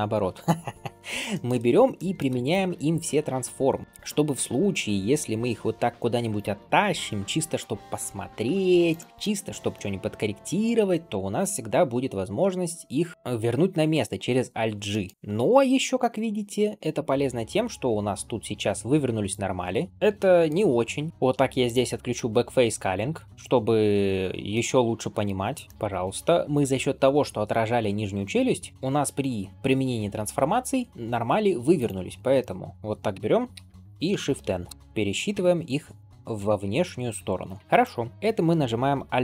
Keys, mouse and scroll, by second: 0.8 scroll down 2, 1.2 shift+middle drag, 1.5 scroll up 2, 1.8 middle click, 2.3 ctrl+a, 3.8 scroll down 3, 4.3 middle click, 4.6 scroll down 1, 5.5 scroll down 1, 5.5 g, 6.8-7.8 scroll up 3, 7.8-8.3 scroll up 1, 8.7 click, 8.7-9.6 scroll up 4, 9.1 shift+middle click, 9.6-11.0 middle drag, 11.2 scroll down 2, 12.3 scroll down 1, 13.1 scroll down 4, 13.8 scroll up 1, 14.6-15.4 scroll up 5, 14.8 shift+middle click, 15.3 click, 15.8 middle click, 16.5-16.8 scroll down 1, 16.8 middle click, 17.3 scroll up 1, 17.7-18.4 middle drag, 19.2-19.9 drag, 19.9 scroll up 2, 20.0 middle click, 21.5-23.9 drag, 24.4-25.1 middle drag, 25.3 drag, 25.6 middle click, 25.6 scroll up 1, 25.9-28.3 scroll down 1, 28.7 middle click, 28.7-29.5 scroll up 2, 31.6 click, 32.0 scroll down 2, 32.2 middle drag, 32.6-32.9 scroll up 1, 33.0 Tab, 33.4 a, 34.7 shift+n, 35.2 Tab, 35.8 click, 36.7 ctrl+s, 37.0-37.7 scroll down 3, 37.6 shift+middle click, 37.7 click.